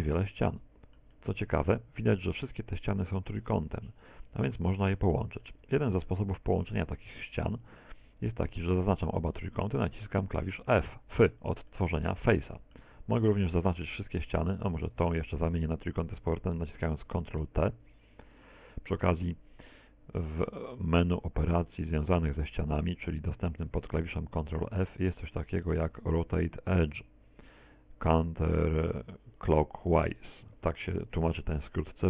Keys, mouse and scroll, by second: 2.8 middle click, 5.2 click, 5.7 z, 6.5 Tab, 6.9 middle click, 9.2 middle click, 12.4 middle click, 12.8 middle click, 15.1 ctrl+Tab, 16.4 right click, 16.6 shift+right click, 17.0 f, 19.3 middle click, 20.2 a, 20.3 a, 20.4 middle click, 21.1 right click, 27.1 ctrl+t, 31.9 ctrl+f.